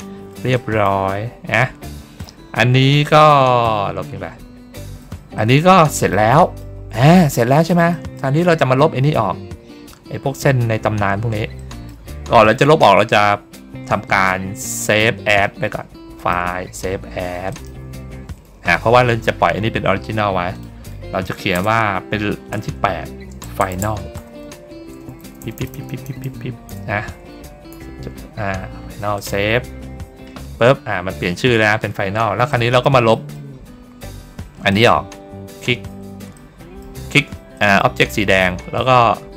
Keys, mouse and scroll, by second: 0.4 middle click, 1.3 ctrl+scroll down 1, 1.8 middle click, 4.6 middle click, 5.2 middle click, 5.8 middle click, 6.3 middle click, 6.9 ctrl+scroll down 1, 7.8 middle click, 8.3 ctrl+scroll down 1, 10.5 ctrl+middle click, 10.5 ctrl+scroll down 1, 11.5 middle click, 16.1 click, 17.4 click, 20.4 click, 29.0 click, 32.4 middle click, 33.0 middle click, 33.7 ctrl+middle click, 34.6 ctrl+click, 36.2 middle click, 37.4 middle click, 38.0 ctrl+scroll down 1, 38.4 ctrl+middle click, 38.4 ctrl+scroll up 1.